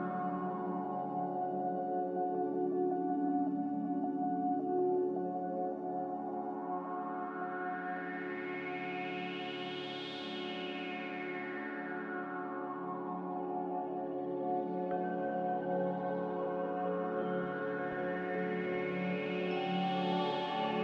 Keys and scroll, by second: 1.7 ctrl+z, 3.3 z, 5.8 typing, 6.0 Return, 10.0 g, 12.3 z, 19.5 ctrl+z.